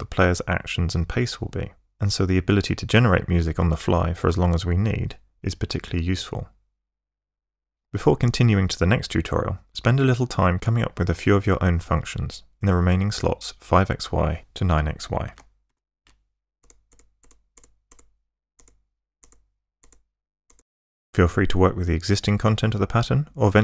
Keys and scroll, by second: 16.5 ctrl+shift+Tab, 18.5 Tab, 19.1 Tab, 19.8 Tab.